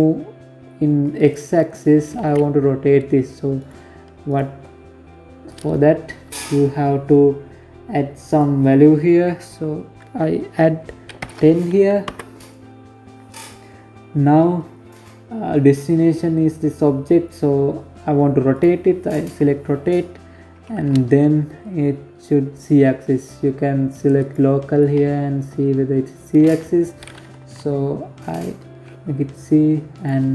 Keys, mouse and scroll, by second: 0.8 click, 0.8 ctrl+z, 2.2 right click, 2.9 right click, 6.9 click, 12.6-13.3 scroll down 1, 13.3-15.1 scroll down 2, 17.1 click, 21.8 click, 23.6 middle click, 26.0 KP_7, 28.6 click.